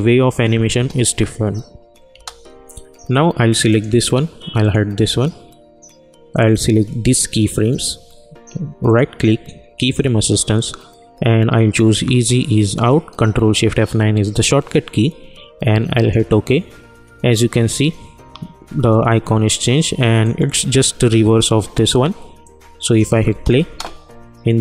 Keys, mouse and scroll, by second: 0.7 space, 3.7-8.8 drag, 8.8 right click, 15.9 click, 20.2 click, 22.4 click, 23.2 space, 24.4 click.